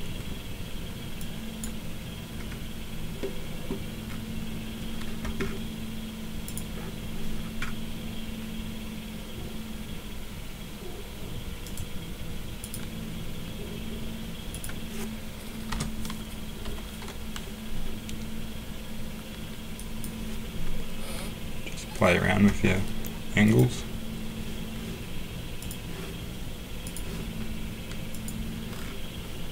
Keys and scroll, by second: 15.7 BackSpace, 16.6 7.